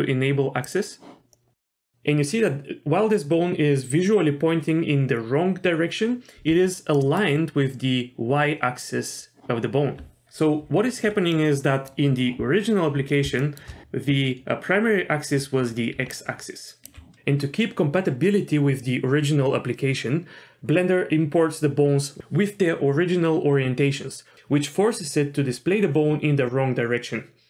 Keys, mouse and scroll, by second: 0.6 click, 1.3 middle click, 1.7 scroll up 1, 7.0 middle click, 11.3 middle click, 13.4 shift+middle click, 15.9 d, 16.1 click, 16.9 d.